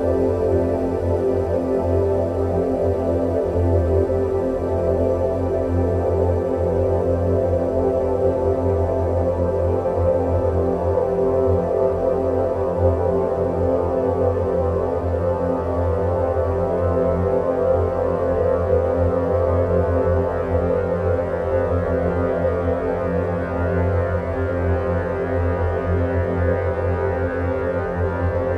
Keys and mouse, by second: 0.3-1.6 drag, 3.1 click, 6.1 Tab, 6.5-7.3 middle drag, 8.1-8.8 middle drag, 16.3-18.2 middle drag, 18.5 Tab, 19.5 ctrl+r, 23.0 3, 24.7-25.3 middle drag, 26.6-28.5 middle drag.